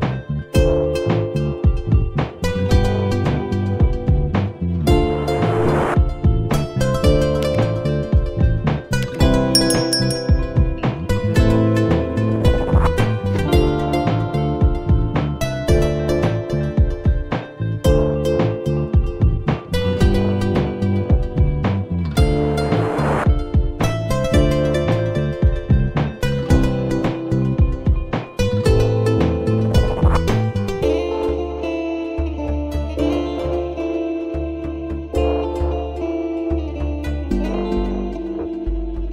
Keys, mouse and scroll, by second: 0.5 ctrl+z, 0.9-3.0 drag, 3.7-6.4 drag, 6.7-8.4 drag, 9.0 click, 10.0 g, 14.2-17.7 drag, 18.0-21.4 drag, 21.5 g, 23.3 click, 23.7 click, 24.1 shift+d, 27.1-30.7 drag, 32.9-34.0 middle drag, 34.0-34.5 alt+scroll up 1, 34.5-35.5 alt+scroll down 3, 35.5-36.0 scroll up 6, 36.0 click, 37.0 g.